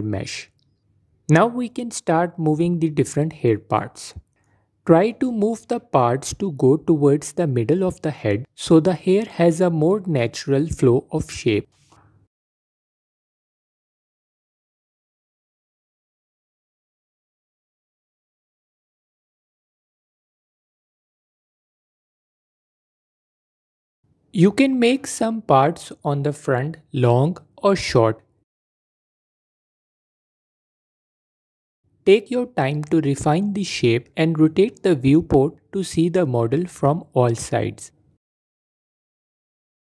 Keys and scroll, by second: 29.6 f, 34.0 f, 35.8 f, 36.4 f, 37.7 f, 39.8 f.